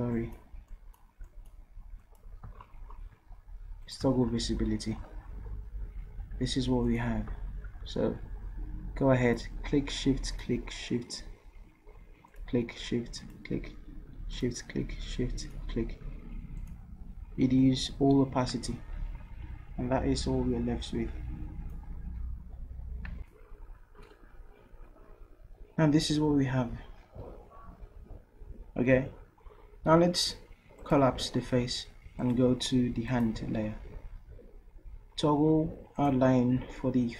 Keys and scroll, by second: 6.2 v.